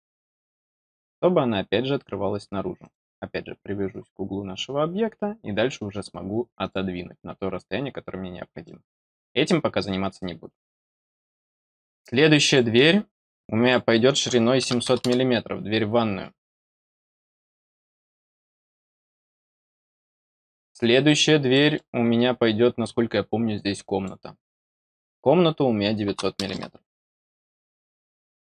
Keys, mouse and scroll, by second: 2.7 click, 3.9-4.3 scroll down 4, 6.5 click, 8.6 middle click, 12.4 click, 13.3 click, 18.2 click, 19.8 middle click, 21.4 middle click, 23.6 click.